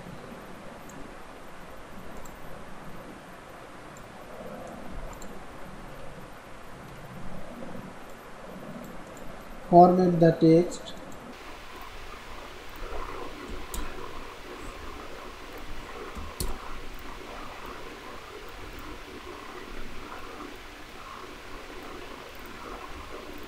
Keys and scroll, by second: 4.9 ctrl+c, 5.5 ctrl+a, 6.5 ctrl+v, 9.4 ctrl+a, 14.7 ctrl+b, 22.9 ctrl+b.